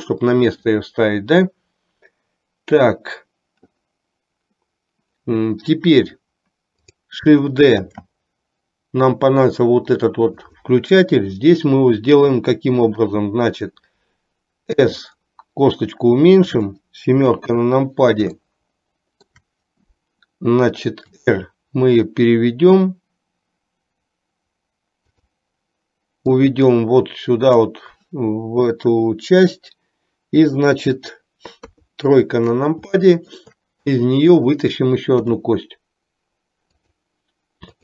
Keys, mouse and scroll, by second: 8.0 shift+d, 14.9 s, 17.3 KP_7, 18.5-19.5 shift+middle drag, 21.2 r, 26.4-27.8 drag, 31.7 KP_3, 33.0 shift+middle click, 35.5 e.